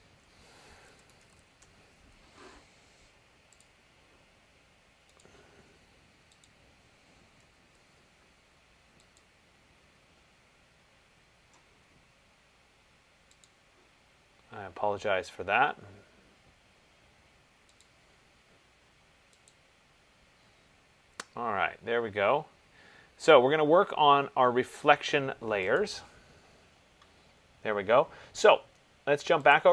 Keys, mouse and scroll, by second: 1.0-4.3 typing, 1.7 Tab, 3.7 click, 6.9 typing, 7.7 ctrl+v, 9.4 click, 13.7 click, 18.0 click, 19.7 click, 21.1 middle click, 21.6 middle click, 26.0 click.